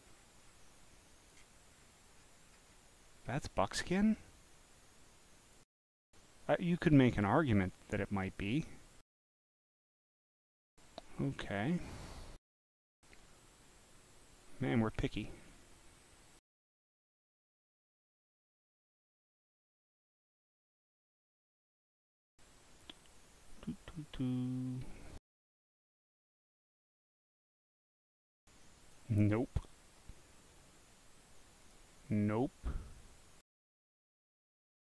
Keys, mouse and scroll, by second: 0.4 scroll, 0.7 click, 1.7-2.7 scroll, 2.9-5.5 drag, 6.4 click, 7.8 click, 9.4 scroll down 2, 16.9 scroll down 3, 19.9 scroll up 2, 20.9 scroll up 1, 22.7 scroll up 2, 23.4 scroll up 2, 24.0 scroll up 1, 24.6 scroll up 1, 27.6 click, 28.6 click, 29.8 middle click, 31.6 click, 33.8 scroll up 2.